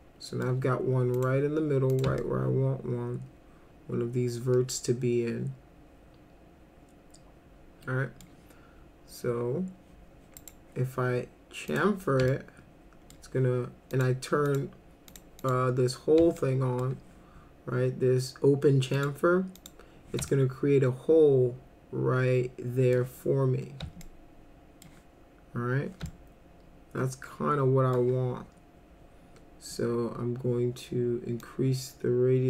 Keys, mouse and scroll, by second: 1.1 click, 1.9 click, 2.2-8.2 alt+middle drag, 10.4 right click, 11.7 click, 12.3 alt+middle click, 13.9 click, 14.5 click, 15.1 click, 15.4 click, 16.4 alt+middle click, 19.0 click, 19.6 click, 20.3-22.9 alt+middle drag, 24.0 alt+middle click, 26.1-28.0 alt+middle drag, 31.4-32.4 drag.